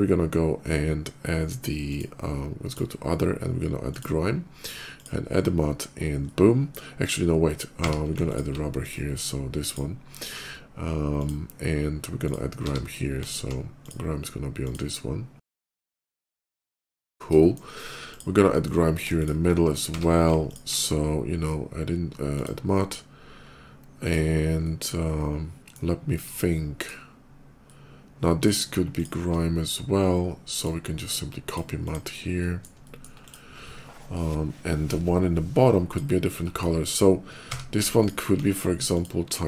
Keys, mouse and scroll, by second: 1.7 click, 2.5 click, 3.6 click, 4.7 click, 6.1 middle click, 7.8 q, 8.1 click, 8.1 q, 8.6 click, 9.5 click, 11.0 click, 12.1 click, 12.8 q, 13.1 alt+click, 13.6 click, 13.6 q, 14.5 click, 15.1 click, 16.1 middle click, 16.5 shift+middle click, 17.3 shift+middle click, 17.9 shift+click, 19.0 shift+click, 19.7 q, 20.2 alt+q, 20.3 click, 22.0 alt+click, 23.4 click, 23.8-25.6 middle drag, 26.6 click, 27.4 middle click, 28.8 shift+click, 30.4 shift+click, 31.2 shift+click, 31.7 shift+click, 32.2 middle click, 32.7 middle click, 33.1 click, 35.7 click, 36.2 middle click, 37.4 q, 37.8 click, 38.8 click.